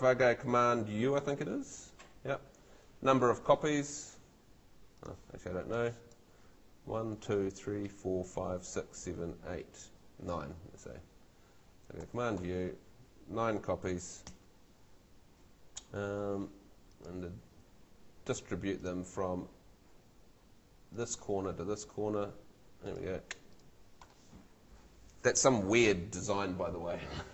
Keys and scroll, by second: 1.3 super+u, 12.0 super+u, 14.2 9.